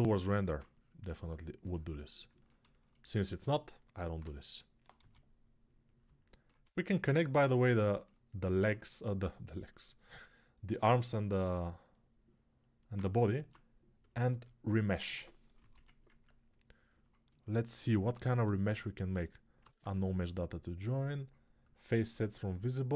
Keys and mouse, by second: 3.2 alt+q, 3.9-13.8 right drag, 4.7 g, 13.1 ctrl+Tab, 13.8 shift+middle click, 15.5 ctrl+j, 18.0 shift+r, 19.0 click, 19.4 ctrl+Tab, 21.6-22.9 ctrl+right drag, 22.0 ctrl+Tab.